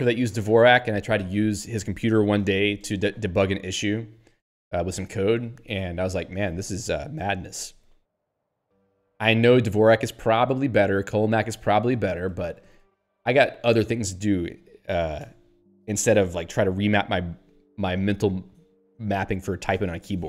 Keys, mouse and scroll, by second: 9.3 click, 9.4 click, 10.3 ctrl+p, 12.2 ctrl+n, 12.9 q.